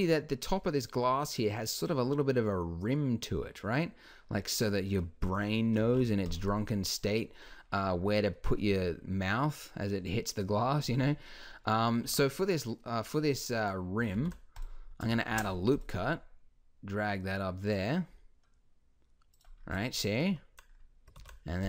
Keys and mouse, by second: 5.8 alt+h, 12.1 Tab, 14.1 ctrl+r, 15.3 ctrl+r, 19.6 middle click, 21.2 ctrl+r.